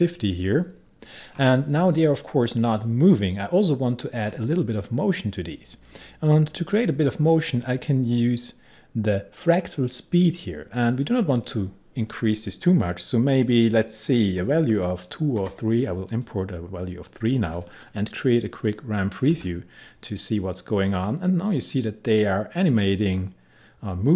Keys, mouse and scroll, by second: 2.0-6.2 drag, 6.7-10.1 drag, 11.4 click, 15.4 3, 16.1 click.